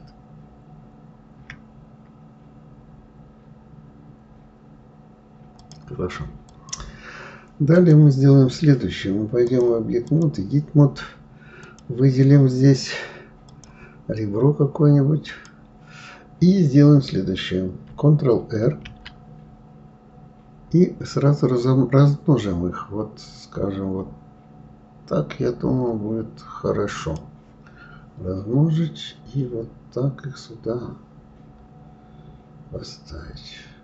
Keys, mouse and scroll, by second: 6.5 click, 7.7 click, 9.4-11.8 drag, 13.5 click, 15.2 click, 18.6 ctrl+r.